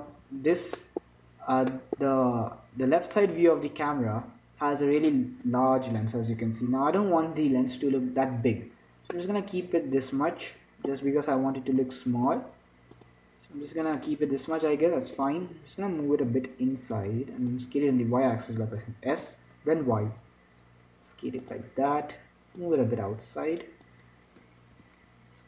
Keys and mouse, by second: 0.5 z, 7.8 z, 9.5-11.0 middle drag, 13.3-14.5 drag, 15.5-16.6 drag, 16.6 z, 17.7-19.3 drag, 19.8 s, 24.2 click, 25.1 s.